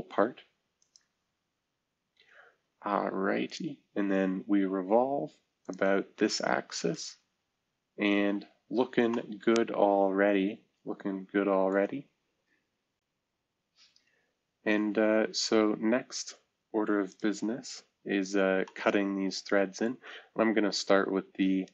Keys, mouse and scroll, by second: 7.5-8.3 scroll down 1, 8.3-8.7 scroll down 1, 8.7-9.4 scroll up 1, 15.4-16.9 scroll up 1, 18.3-19.0 scroll down 2, 20.2-21.0 scroll up 2.